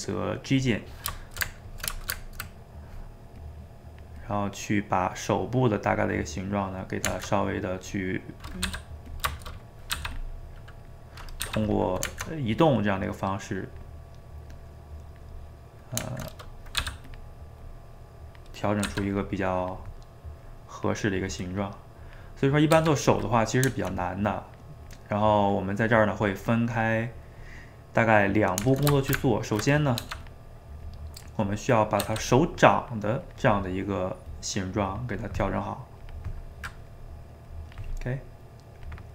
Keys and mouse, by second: 0.6 click, 1.2-3.4 ctrl+shift+middle drag, 3.4-4.6 drag, 4.6-5.9 middle drag, 5.9 click, 6.7-7.9 middle drag, 7.9 click, 8.7 f, 9.3 shift+middle click, 9.9 f, 10.3 middle click, 10.9 click, 11.4 f, 11.9 middle click, 12.7-14.0 drag, 14.0 middle click, 14.5 click, 15.4-16.8 middle drag, 16.8 f, 17.7-18.9 drag, 18.9 f, 19.6-22.8 drag, 22.8 f, 23.3-24.3 middle drag, 24.3-27.3 drag, 27.3-30.0 middle drag, 30.0 f, 30.8-32.0 drag, 32.0 f, 32.7-36.5 drag, 36.5 middle click, 37.5-39.1 drag.